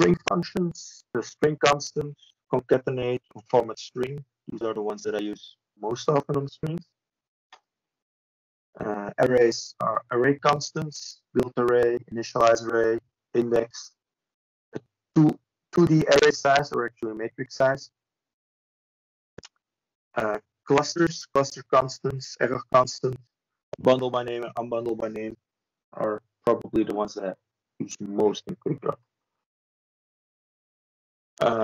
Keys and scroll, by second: 10.8 ctrl+space, 17.6 ctrl+e, 21.2 ctrl+space, 29.3 F3.